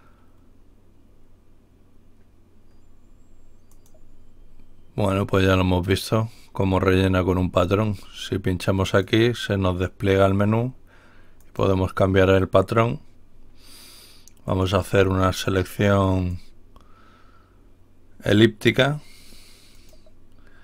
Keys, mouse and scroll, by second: 3.7 click, 8.7 click, 11.4 click, 14.5 click, 16.2-19.1 drag, 19.7 click.